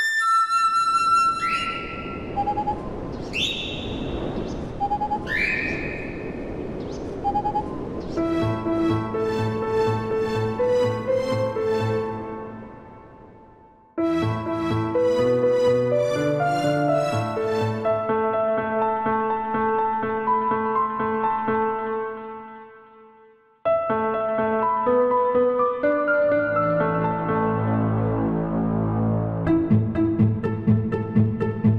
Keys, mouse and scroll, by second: 0.3 click, 2.4 g, 4.7 click, 6.2 click, 7.0 click, 7.5 click, 7.8 KP_7, 8.4 click, 9.6 click, 10.2 click, 11.5 click, 12.1 click, 13.9 click, 15.2 shift+click, 15.5 shift+click, 16.2 ctrl+p, 17.6 a, 17.6 a, 17.9 click, 18.2 click, 19.8 click, 20.2 click, 21.1 click, 22.8 KP_1, 23.8 click, 24.2 click, 25.2 click, 25.8 shift+d, 26.4 click, 27.7 s, 28.5 click, 29.7 click, 30.2 shift+click, 30.8 ctrl+p, 31.5 click.